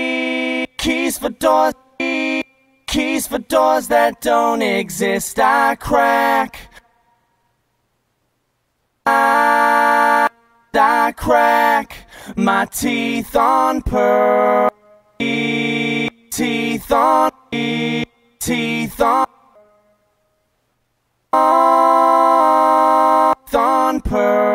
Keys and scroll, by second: 1.0 space, 3.1 space, 7.0 space, 11.0 space, 14.9 space, 17.5 space, 18.6 space, 19.5 space, 23.7 space.